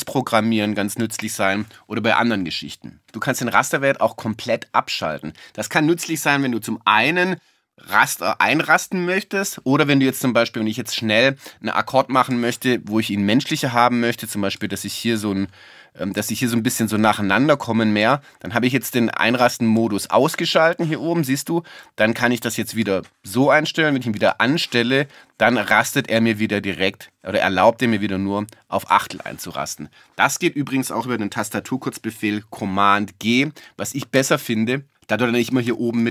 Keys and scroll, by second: 34.2 super+g, 35.7 super+g.